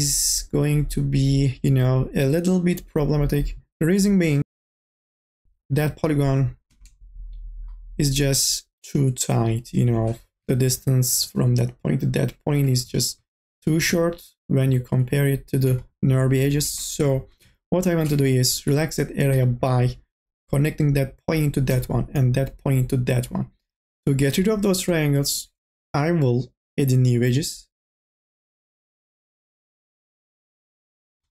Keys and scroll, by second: 4.6-5.8 typing, 10.4 1, 13.8 2, 14.3 e, 17.0 2, 18.2 1.